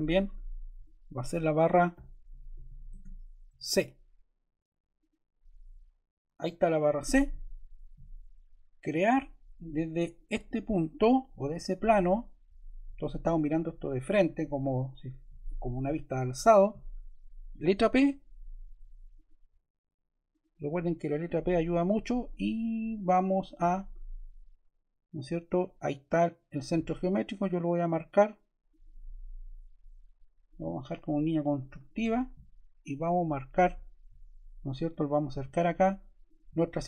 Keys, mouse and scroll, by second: 1.6-3.2 typing, 17.6 p, 19.0 click, 20.2 click, 29.3 ↺.